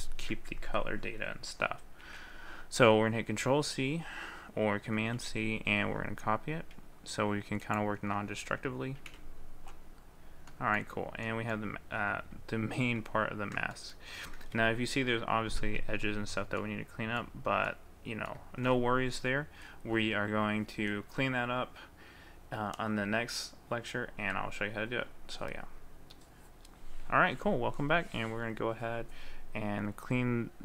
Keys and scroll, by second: 2.1 ctrl+c.